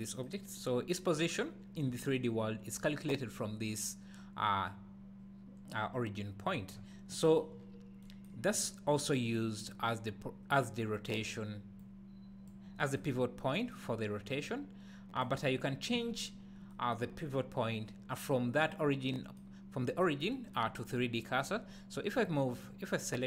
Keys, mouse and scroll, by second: 0.4 scroll up 2, 6.8-7.2 scroll down 1, 7.6 scroll up 1, 8.5 click, 9.6 click, 10.5 click, 10.9 click, 11.8-22.3 drag, 13.2-13.5 scroll up 2, 16.0-16.7 scroll down 2, 20.8-21.3 scroll down 2, 22.5 click.